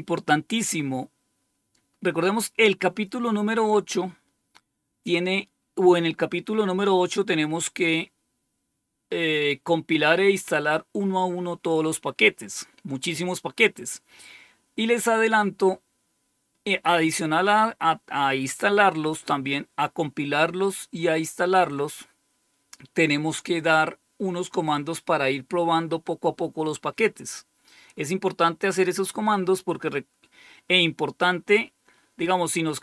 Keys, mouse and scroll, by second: 0.0-3.0 scroll down 11, 7.1 scroll down 2, 10.6-11.3 scroll up 2.